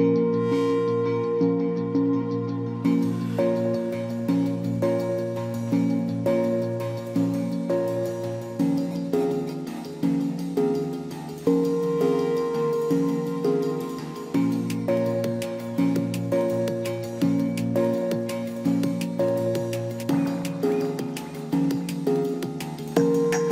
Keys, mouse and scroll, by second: 2.3 ctrl+t, 13.0 ctrl+j, 16.1 ctrl+j.